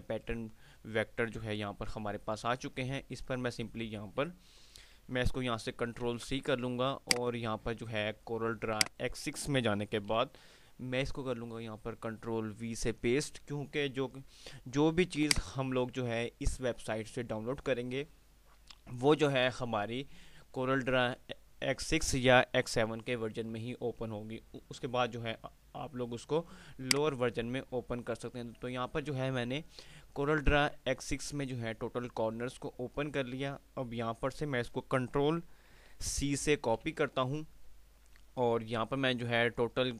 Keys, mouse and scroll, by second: 2.2 F5, 5.1 F5, 5.9 ctrl+c, 7.2 click, 11.0 ctrl+v, 15.3 click, 17.8 typing, 26.7 click, 27.2 typing, 35.9 click, 36.8 ctrl+c, 39.0 typing.